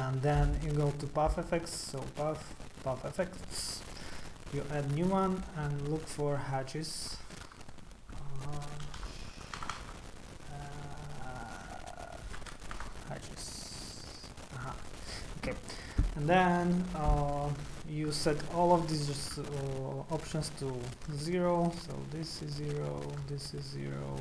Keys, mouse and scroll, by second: 1.8 click, 3.3 click, 4.5 click, 6.8 click, 8.6-9.6 typing, 11.6 a, 11.6 a, 12.7 BackSpace, 12.8 BackSpace, 14.4 click, 20.2 click, 21.1 KP_0, 21.2 KP_0, 22.2 click, 22.8 click, 23.0 middle click, 23.2 KP_0, 23.2 KP_0, 23.6 click, 24.0 click.